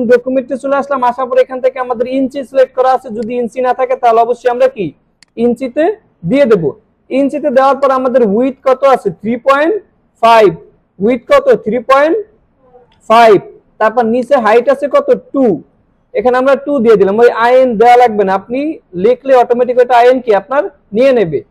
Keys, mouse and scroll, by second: 3.2 click, 7.8-8.7 drag, 14.1-14.8 drag.